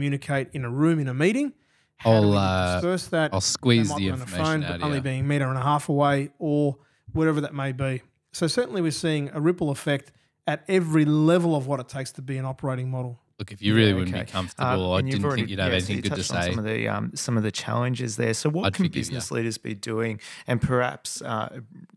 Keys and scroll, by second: 10.8 g, 11.7 BackSpace, 14.3 Delete, 18.3 f.